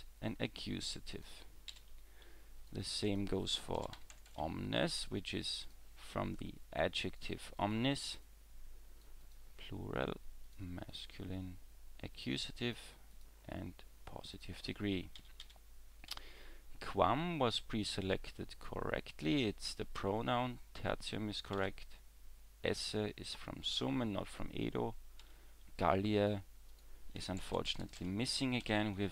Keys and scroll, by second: 1.7 e, 15.2 w, 15.4 w, 16.1 w, 20.0 w, 25.2 w.